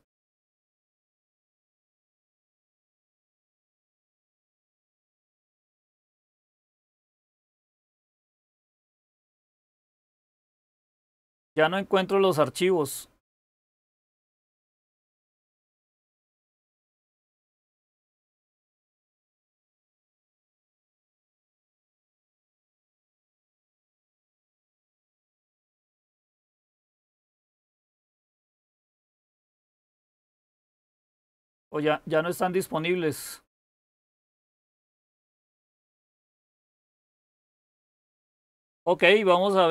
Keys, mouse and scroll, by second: 28.9-31.4 scroll up 2, 31.4-32.2 scroll up 1, 32.2-34.8 scroll up 1, 34.8-35.3 scroll up 1, 35.3-38.8 scroll up 1, 38.8-39.7 scroll up 1.